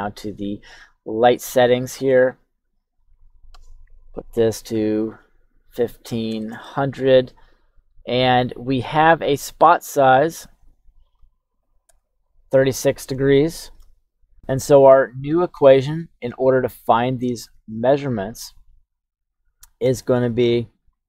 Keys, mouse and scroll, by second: 1.7 click, 3.0-6.5 drag, 4.9 KP_0, 10.3-11.9 drag, 13.3-13.7 shift+middle drag, 14.4 click, 18.1 right click, 18.3 KP_1, 19.9 click, 20.7 click.